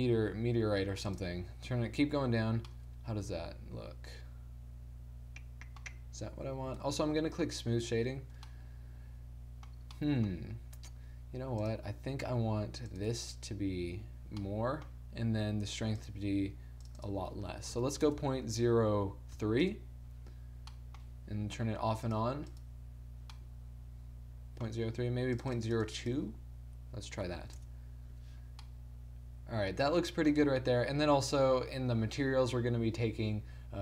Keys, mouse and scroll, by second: 1.5-2.6 drag, 2.6 middle click, 4.5-5.9 middle drag, 5.9-6.5 scroll up 1, 6.5-7.6 middle drag, 6.8 t, 7.6 click, 8.3 t, 8.6 middle click, 11.7-14.2 middle drag, 14.4 middle click, 16.0-20.1 middle drag, 22.2-24.6 middle drag, 25.4-28.0 middle drag, 28.7 middle click, 30.4-33.8 middle drag.